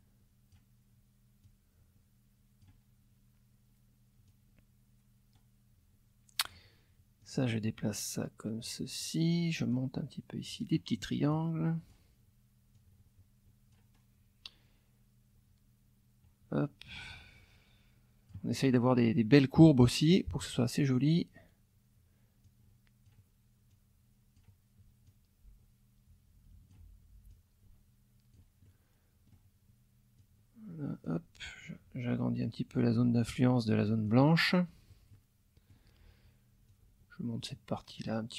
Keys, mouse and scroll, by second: 1.4-2.8 drag, 4.2-5.4 drag, 5.4-6.7 scroll down 2, 7.2-8.6 drag, 8.6-8.9 scroll down 2, 9.7 click, 10.5-10.9 scroll up 2, 11.3 click, 12.7-14.0 scroll down 1, 17.1-18.5 drag, 19.6 middle click, 22.4 click, 23.7 click, 25.0-26.9 drag, 27.3-28.5 drag, 28.6 middle click, 29.5-30.2 scroll up 1, 30.2-31.3 drag, 31.3-32.4 scroll up 1, 32.4-34.3 drag, 35.1 middle click, 36.7-38.2 drag.